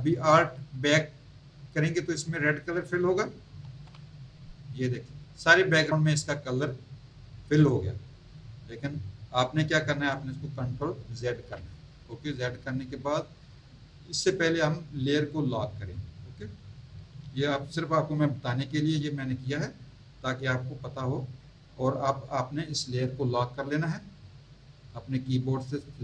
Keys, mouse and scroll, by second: 3.6 alt+BackSpace, 11.3 ctrl+z, 15.3 click.